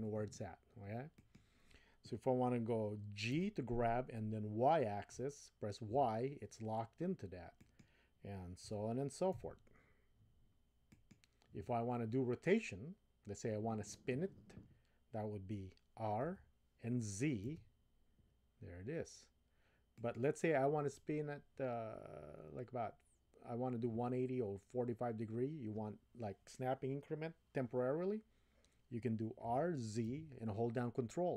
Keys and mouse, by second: 3.3 g, 8.6 g, 16.2 r, 29.4 r.